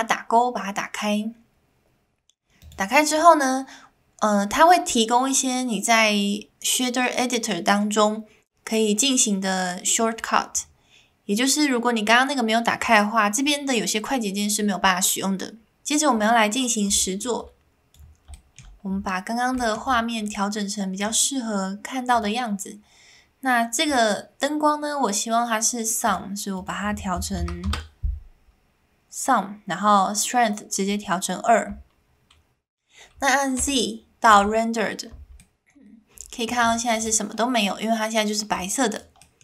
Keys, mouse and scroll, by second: 17.4 click, 38.7 middle click, 38.7 scroll up 2, 38.7 click, 39.2 middle click.